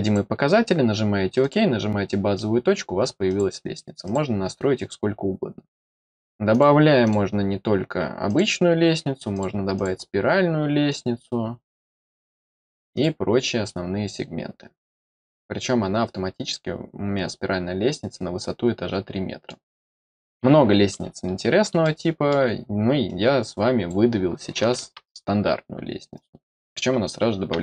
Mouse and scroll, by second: 0.0 click, 1.4 click, 2.3-2.7 middle drag, 3.2 click, 4.0 click, 5.7 click, 6.5 click, 7.0 click, 8.2 click, 9.3 click, 9.7 click, 10.8 click, 12.0 click, 12.9 click, 13.6-19.4 middle drag, 21.8-22.2 middle drag, 23.0-23.8 drag, 26.1-26.5 drag.